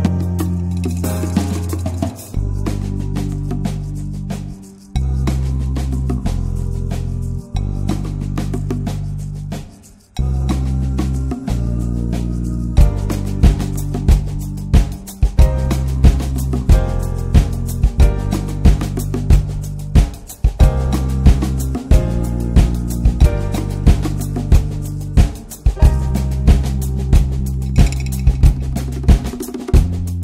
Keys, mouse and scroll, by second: 0.0-3.0 middle drag, 3.0 click, 3.9-5.2 drag, 7.7 scroll down 3, 8.0-8.3 middle drag, 8.3-8.7 scroll up 1, 8.7 click, 8.8-9.6 right drag, 9.6 click, 9.8 scroll down 2, 9.9 middle click, 10.1 scroll up 2, 10.2-14.1 middle drag, 14.1-15.1 drag, 15.1 scroll up 1, 15.3-16.6 middle drag, 16.6-18.1 drag, 18.1 scroll down 3, 18.3 middle click, 18.9-22.2 drag, 22.8 middle click, 23.0-23.5 scroll up 1, 23.5-27.1 drag, 27.1-27.5 middle drag, 27.5 click, 28.0 ctrl+1, 28.1 click, 28.3 middle click, 28.7-29.8 drag, 29.8-30.2 scroll up 3, 30.0 shift+middle click.